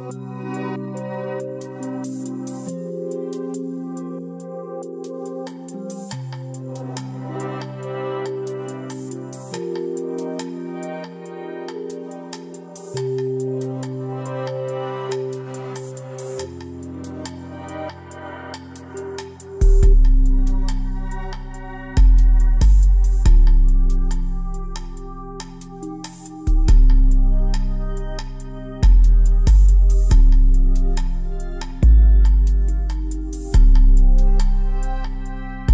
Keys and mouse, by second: 2.4 Tab, 4.1 a, 13.7 a, 17.1 l, 26.7 g, 29.6 a, 30.6 a, 31.7 a, 33.1 l, 33.8 h, 35.6 k.